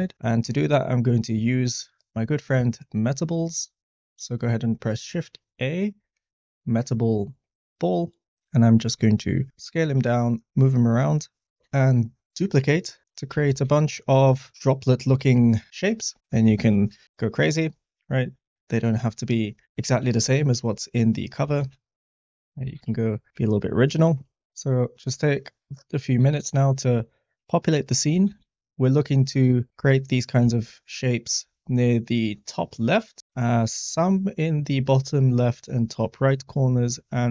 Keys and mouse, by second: 1.5 middle click, 2.3 middle click, 8.8 s, 9.7 g, 9.8 z, 10.4 click, 11.6 s, 11.6 shift+d, 12.9-17.0 typing, 13.1 click, 14.1 click, 14.8 click, 15.6 click, 16.2 click, 20.0 shift+d, 21.5 shift+d, 22.8 shift+d, 23.3 s, 26.2 shift+d, 28.2 shift+d, 29.6 click, 29.7 shift+d, 29.8 s, 30.5 shift+d, 31.5 s, 32.1 click, 33.2 shift+middle click.